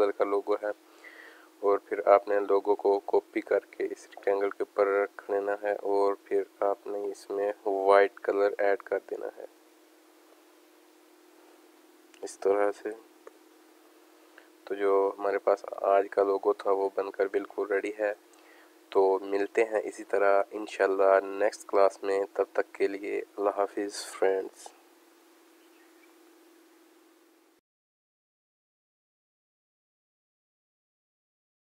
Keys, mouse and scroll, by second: 0.1 click, 1.0 click, 1.9 click, 2.4 click, 3.9 click, 3.9-5.9 drag, 7.8 click, 8.6 click, 9.6 click, 10.9 click, 13.3 ctrl+shift+], 14.9 click, 15.2 space, 15.4 click, 15.9 alt+scroll down 1, 16.3 space, 16.4 click, 16.9 alt+scroll up 1, 17.5 space, 17.6 click, 18.0 space, 18.6 alt+scroll down 1, 19.0 space, 19.0 click, 19.1 click, 22.3 space, 22.4 click, 22.9 space.